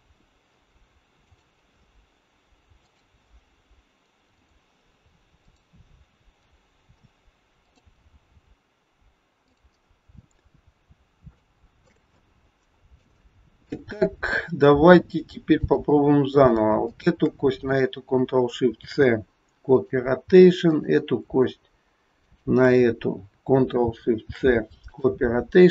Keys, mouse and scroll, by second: 1.3 click, 9.5 click, 10.9 scroll down 1, 11.5 shift+middle click, 12.1 middle click, 13.2 shift+middle click, 15.6 click, 17.0 shift+click, 18.7 ctrl+shift+c, 20.7 click, 22.2 shift+click, 24.2 ctrl+shift+c.